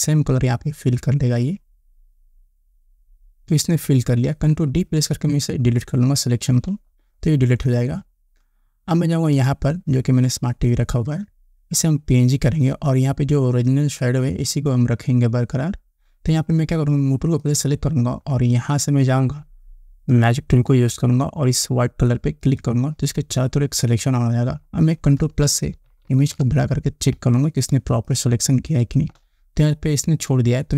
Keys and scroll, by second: 6.8 ctrl+d, 26.3 ctrl+=, 27.6 space.